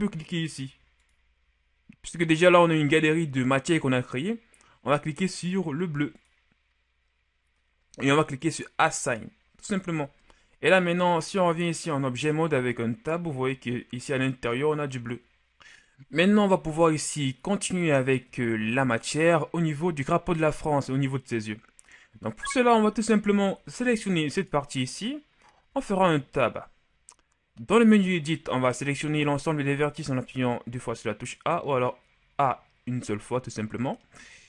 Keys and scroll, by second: 10.2 Tab, 18.5 KP_1, 25.7 Tab, 29.0 a, 29.5 a.